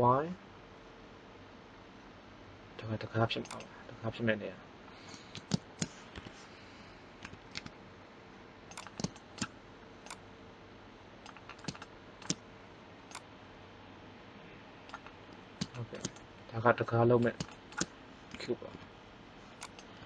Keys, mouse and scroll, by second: 6.1 KP_1, 7.1 s, 8.9 middle click, 9.7-11.5 drag, 13.0-14.8 drag, 18.2 s.